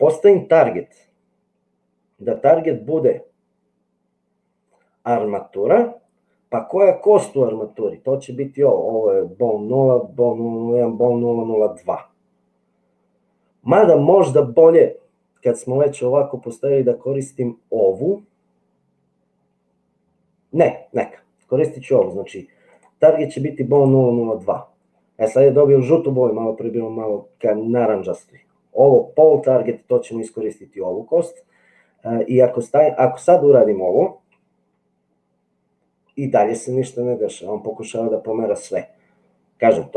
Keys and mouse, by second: 0.6-5.6 drag, 22.7-24.0 drag, 32.9 click, 34.3 g.